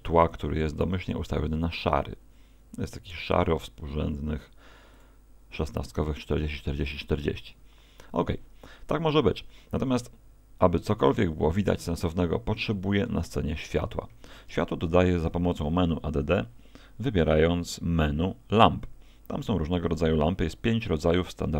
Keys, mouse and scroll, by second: 13.1 Escape, 13.1 click, 14.3 shift+a.